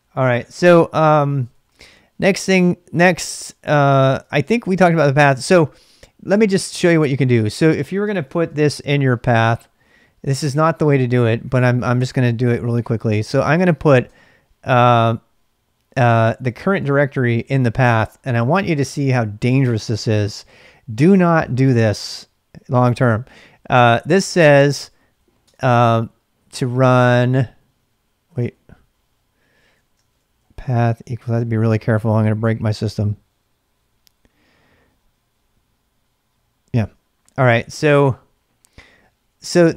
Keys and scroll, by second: 0.1-2.1 typing, 4.3 ctrl+a, 4.5 ctrl+a, 6.3-11.4 typing, 10.6 ctrl+[, 12.8-14.1 typing, 16.8 typing, 19.9 typing, 25.4 Return, 27.0 ctrl+[, 27.1 typing, 28.2-31.4 typing, 36.8 Return.